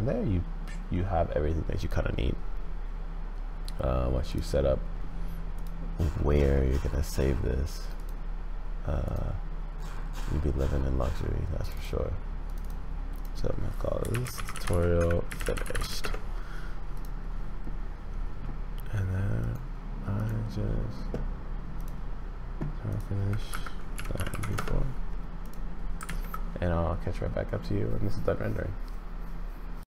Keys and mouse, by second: 4.3 click, 19.4 click, 26.0 ctrl+s.